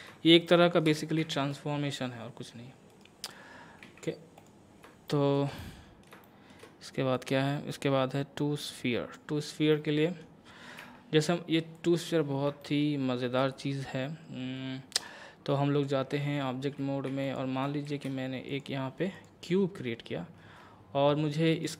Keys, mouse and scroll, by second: 0.5 shift+middle click, 1.2 Tab, 2.9 right click, 3.8 x, 4.4 click, 5.1 shift+middle click, 5.6 middle click, 7.1-9.7 drag, 9.7 middle click, 10.0-10.4 scroll up 1, 10.8 Tab, 11.7 click, 12.2 scroll up 1, 12.6 shift+middle click, 16.0 Tab, 17.1 x, 17.2 click, 17.9 shift+a, 18.5 click, 19.6-20.4 scroll up 2, 20.4 Tab, 21.5 right click.